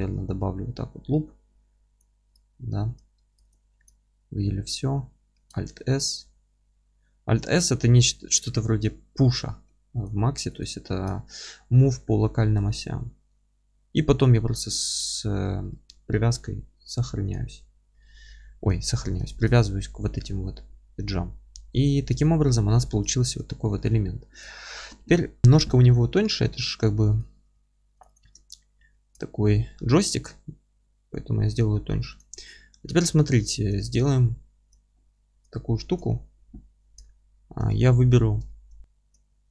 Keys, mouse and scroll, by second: 2.6 3, 3.4 click, 3.9-10.0 alt+middle drag, 5.4 alt+s, 8.5-8.9 scroll up 1, 9.5 2, 10.5 click, 10.9-14.9 alt+middle drag, 11.2 scroll up 1, 11.6 g, 14.9 ctrl+click, 15.1-15.4 scroll down 1, 15.4-22.7 alt+middle drag, 19.0 scroll up 1, 22.5 3, 22.7 click, 23.1-27.2 alt+middle drag, 23.5 scroll down 1, 23.7 g, 27.2 click, 28.1 click, 28.9-32.2 alt+middle drag, 30.2 alt+s, 32.2 click, 32.5 alt+middle click, 32.9-39.5 middle drag, 32.9 scroll up 1, 33.2 Tab, 34.8-35.1 scroll down 1, 36.0 Tab, 38.8 Tab.